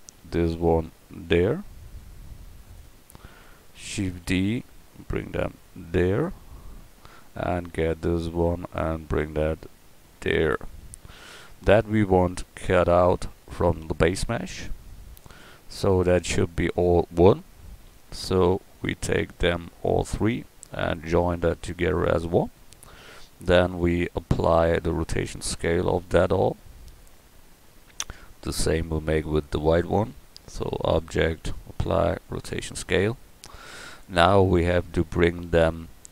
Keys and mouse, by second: 0.1 g, 4.1 shift+d, 8.5 g, 21.2 middle click, 28.9-30.1 drag, 34.3-36.1 drag.